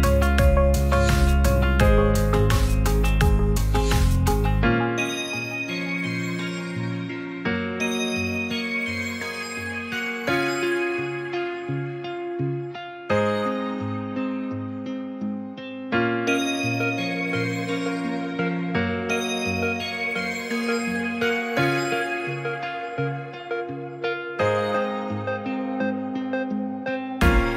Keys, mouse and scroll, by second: 0.9 middle click, 2.3 click, 4.2-4.8 middle drag, 5.3-6.0 middle drag, 7.1 shift+middle click, 7.4 middle click, 7.6 shift+a, 9.2 shift+middle click, 9.5 middle drag, 10.0 shift+a, 11.4-11.8 middle drag, 12.2 middle click, 13.7 middle click, 14.0 Tab, 14.3 ctrl+r, 15.9 v, 16.2 right click, 16.6 middle click, 17.4 a, 17.7 e, 18.4 click, 18.7 Tab, 19.0 s, 19.2 shift+z, 19.8 click, 21.9 q, 23.1 ctrl+a, 24.2 click, 24.4 click, 24.8-25.8 shift+drag, 26.1 right click, 26.6 shift+middle drag, 26.9-27.3 middle drag, 27.5 g.